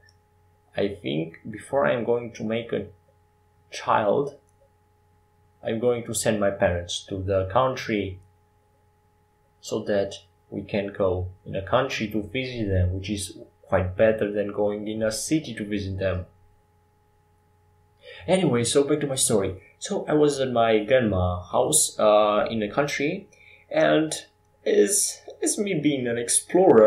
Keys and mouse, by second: 0.5 Tab, 0.8 w, 3.7 s, 9.2-11.0 drag, 9.8 shift+a, 12.1 shift+d, 15.0 s, 17.8 s, 21.2-23.2 drag, 23.3 s, 25.4 Tab.